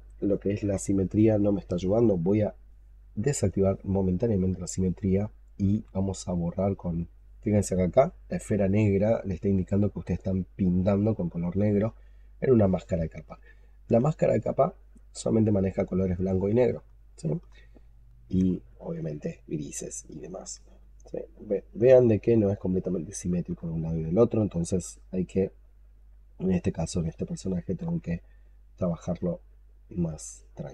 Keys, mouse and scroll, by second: 5.6 x, 9.6 double click, 10.8 double click, 11.2 double click, 13.2 alt+click, 14.3 alt+click, 14.6 alt+right click, 15.7 alt+middle click, 15.8 alt+click, 16.9 alt+click, 18.6 alt+click, 20.7 alt+click, 25.2 double click, 25.6 double click, 25.9 double click, 26.1 double click, 27.7 x, 28.7 double click, 29.7 double click, 30.0 double click, 30.2 double click.